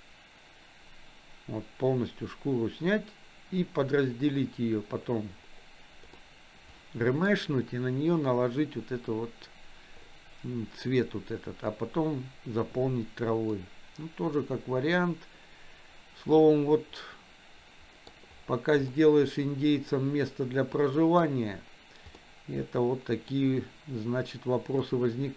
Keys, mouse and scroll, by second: 6.3-7.3 middle drag, 13.6-18.1 middle drag, 18.9-21.2 middle drag, 22.3-23.3 middle drag, 24.9-25.3 middle drag.